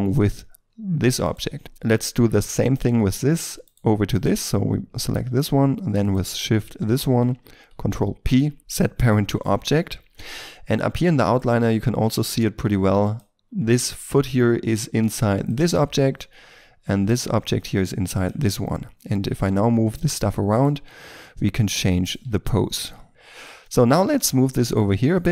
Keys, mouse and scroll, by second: 1.2 right click, 1.6 shift+middle click, 3.6 right click, 6.1 shift+right click, 8.1 ctrl+p, 12.4-14.7 scroll down 1, 16.2-18.7 scroll up 1, 18.7 scroll down 1, 19.2 r, 20.0 right click, 20.8 r, 22.2 r, 23.1 middle click, 24.9 shift+middle click.